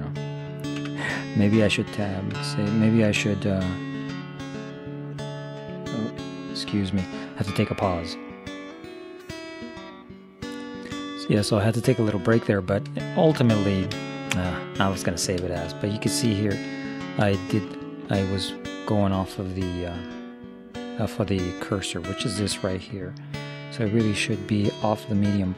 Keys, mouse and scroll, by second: 0.8 Tab, 1.4-2.6 middle drag, 2.4 Tab, 6.0-7.1 drag, 12.5-18.5 middle drag, 19.3 middle click, 22.4-24.4 drag.